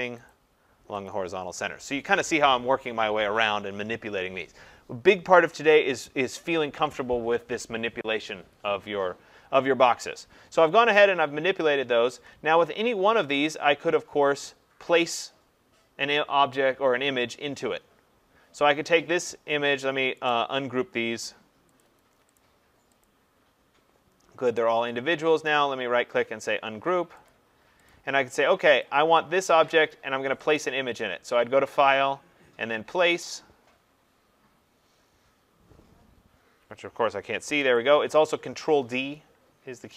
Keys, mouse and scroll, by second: 0.3 click, 1.1 click, 18.7 click, 20.3 right click, 21.8 click, 22.4 click, 23.0 click, 24.6 click, 25.5 right click, 27.3 click, 27.9 click, 28.8 click, 30.6 click, 37.8 click.